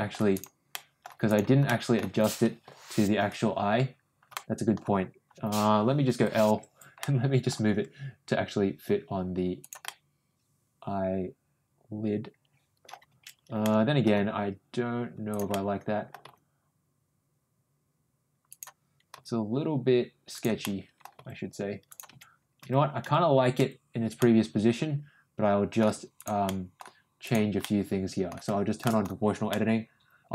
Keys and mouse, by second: 0.3 click, 0.7 middle click, 1.2 click, 1.7 middle click, 2.6 l, 4.3 middle click, 6.1 l, 7.0 middle click, 7.7 g, 9.8-12.8 middle drag, 13.6 ctrl+middle click, 14.1 ctrl+g, 15.5 middle click, 16.2 ctrl+g, 19.1 g, 20.6 middle click, 21.1 g, 24.1-25.8 middle drag, 26.1 ctrl+click, 26.4 ctrl+middle click, 27.2 ctrl+click, 27.6 middle click, 28.8 shift+middle click, 29.4 middle click.